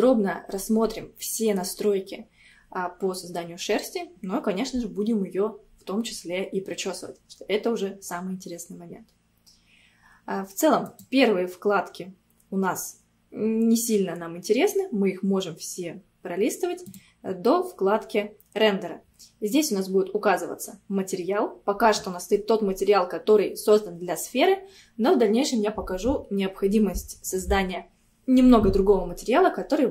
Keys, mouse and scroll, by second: 10.9-12.7 drag, 12.7-13.6 scroll down 2, 13.6-14.7 scroll down 1, 14.7-15.7 scroll down 1, 15.7-16.9 scroll down 4, 16.9-17.9 drag, 17.9-18.6 scroll down 2.